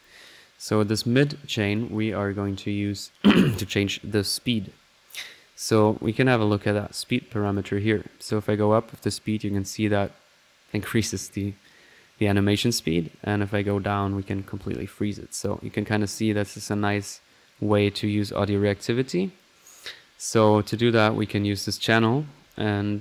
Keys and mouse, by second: 0.0 click, 0.7 click, 5.8 click, 7.0-7.4 drag, 7.5 click, 8.3-19.6 drag, 11.7-12.4 typing, 20.3 click, 20.7 middle click, 21.4-21.7 drag, 21.9 right click, 22.1-22.8 typing.